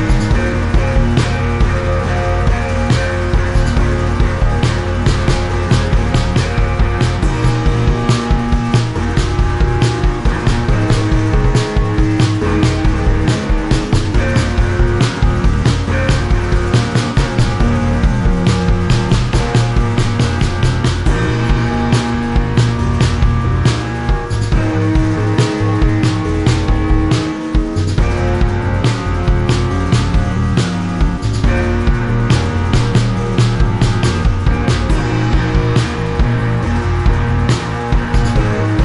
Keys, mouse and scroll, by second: 6.5 click, 11.0 click, 12.2 click, 14.1 click, 15.0 click, 15.9 click, 17.1 click, 18.1 click, 19.7 click, 20.6 click, 22.8 click, 24.3 shift+click, 25.9 shift+click, 26.9 shift+click, 28.0 click, 28.4 click, 30.5 click, 31.8 ctrl+z, 32.9 click, 34.5 ctrl+z, 34.5 click, 37.8 click.